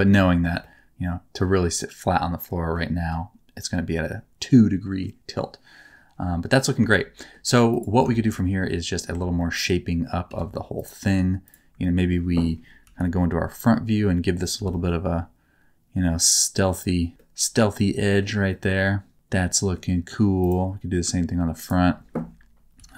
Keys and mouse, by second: 0.5-2.7 middle drag, 4.5 middle click, 5.2-6.6 middle drag, 6.8 shift+middle click, 7.1 middle click, 7.6 click, 8.1 shift+middle click, 8.3 middle click, 9.1 Tab, 9.3 middle click, 10.2 1, 11.8 middle click, 12.8 KP_1, 14.5 g, 14.7 middle click, 17.1-18.1 middle drag, 18.4-19.7 middle drag, 20.3 right click, 21.5 ctrl+right click, 22.7 KP_3.